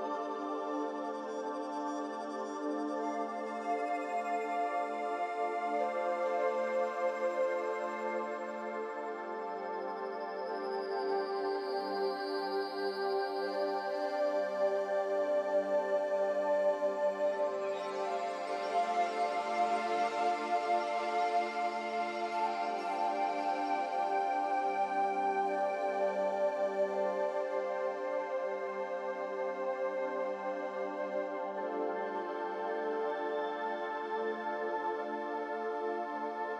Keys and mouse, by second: 3.8 s, 6.5 g, 7.3 g, 9.5 click, 10.3-11.2 drag, 11.5 drag, 11.9 click, 12.1 click, 12.9 click, 14.7 g, 18.1 shift+click, 19.7 ctrl+shift+KP_Subtract, 24.6 click, 25.5 click, 26.9 g, 32.7-34.0 drag.